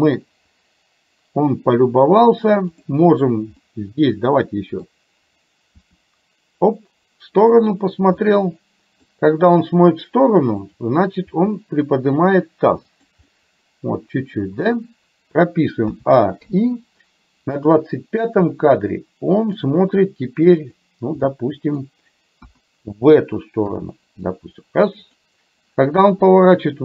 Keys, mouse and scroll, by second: 3.7-4.9 middle drag, 5.9 r, 8.3 middle click, 10.7 click, 11.3 r, 13.3-14.7 middle drag, 15.9 a, 16.4 i, 17.7 click, 18.6-19.6 middle drag, 20.6 click, 21.3 middle click, 22.4 KP_1, 23.7 r.